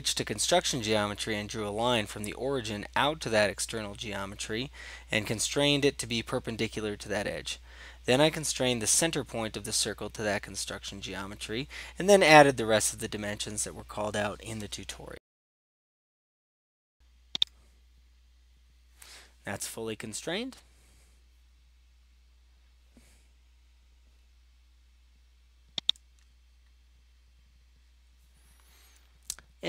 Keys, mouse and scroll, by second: 2.3 click, 2.8 click, 3.4 right click, 4.2 click, 4.6 click, 5.0 click, 5.4 click, 6.2 right click, 6.8 click, 7.1 click, 8.8 click, 9.5 click, 9.7 click, 10.0 click, 15.0 click, 15.6 click, 16.3 typing, 16.6 Return, 17.5 right click, 26.0-27.0 drag.